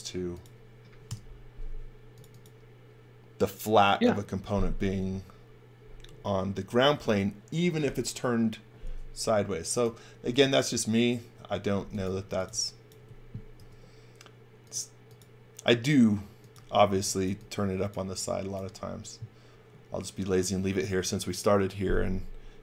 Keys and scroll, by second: 1.0 Delete, 12.0-13.5 typing, 16.8 x, 17.1 v.